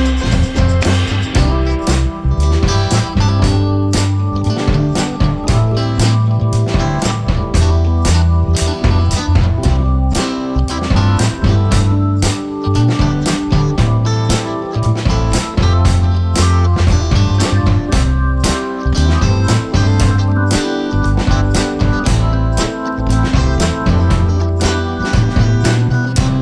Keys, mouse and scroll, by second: 1.4 click, 2.3 click, 3.0-3.4 scroll down 2, 3.4-6.0 middle drag, 6.0 scroll up 1, 6.3-7.5 shift+middle drag, 7.5 scroll down 1, 7.8-9.9 shift+middle drag, 9.9 click, 10.1-10.7 scroll up 2, 11.4-12.0 scroll down 1, 12.3-12.7 middle drag, 12.7-13.5 scroll down 3, 13.5 n, 14.0-15.6 middle drag, 15.6 click, 16.5 shift+a, 19.0-19.4 scroll up 1, 20.3 ., 21.7 click, 22.1 ., 23.0 scroll down 1, 23.3 middle click, 24.0 KP_0, 25.5 g.